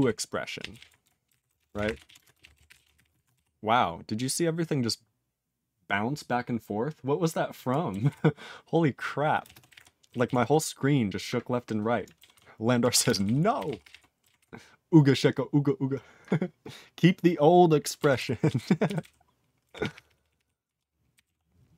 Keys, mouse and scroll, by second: 0.0-3.8 typing, 8.1 ctrl+s, 9.4 ctrl+space, 9.4 ctrl+a, 9.6 ctrl+g, 9.7 ctrl+e, 10.2 ctrl+s, 12.3 ctrl+s, 12.8 ctrl+a, 12.9 ctrl+space, 13.0 ctrl+e, 13.1 ctrl+n, 13.2 ctrl+n, 13.5 ctrl+g, 13.6 ctrl+e, 13.8 ctrl+p, 13.8 ctrl+e, 14.3 ctrl+s, 18.1 ctrl+s, 18.8 ctrl+n, 19.0 ctrl+n, 19.6 ctrl+p, 19.8 ctrl+p, 19.9 ctrl+p, 20.0 ctrl+p, 20.2 ctrl+p, 20.3 ctrl+p, 20.6 ctrl+p, 21.1 ctrl+n, 21.2 ctrl+a.